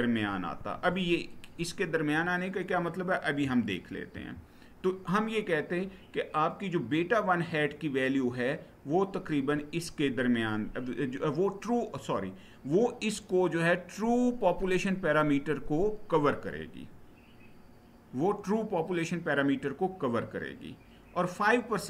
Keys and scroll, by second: 3.9 Right.